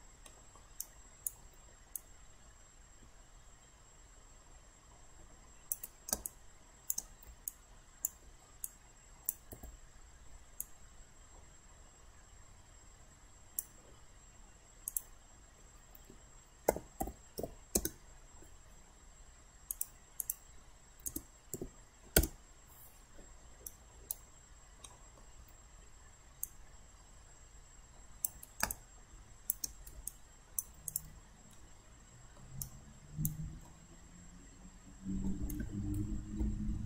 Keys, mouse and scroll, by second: 0.3 alt+middle click, 0.8 alt+right click, 2.0-7.3 drag, 7.5 alt+click, 8.7 click, 9.5 typing, 16.7-17.4 typing, 17.8 Return, 19.7 click, 21.1-21.6 typing, 22.2 Return, 23.7 alt+right click, 24.9 alt+middle click, 26.4-29.9 drag, 30.1 alt+click, 30.9 click, 31.6 alt+middle click, 32.6 alt+right click, 33.7 alt+middle click.